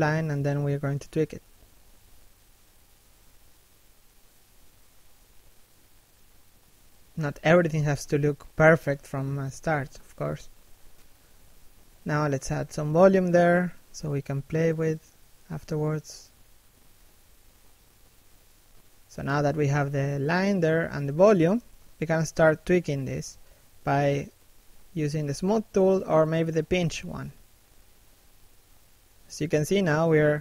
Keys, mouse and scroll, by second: 0.0 shift+click, 1.2 middle click, 1.6 shift+middle click, 2.3 shift+click, 3.5 scroll down 1, 3.8 middle click, 4.2 shift+middle click, 4.4 middle click, 4.9 shift+middle click, 5.2 middle click, 5.4-5.8 scroll up 1, 5.8 d, 7.2 f, 7.5 click, 8.1 shift+f, 10.9 shift+middle click, 11.4 click, 12.0 shift+middle click, 12.6 click, 13.4 shift+middle click, 13.7 f, 13.9 click, 15.7 f, 16.2 click, 17.6 scroll down 1, 17.8 middle click, 19.6-19.9 scroll up 1, 19.9 click, 20.5 scroll up 1, 20.8 s, 21.2 click, 23.1 p, 23.5 f, 23.8 click, 24.0 scroll up 1, 24.3 middle click, 24.7 shift+middle click, 25.2 click, 28.7 scroll down 1, 28.9 middle click, 29.3 shift+middle click, 29.8 middle click, 30.1 shift+middle click, 30.3 scroll up 1.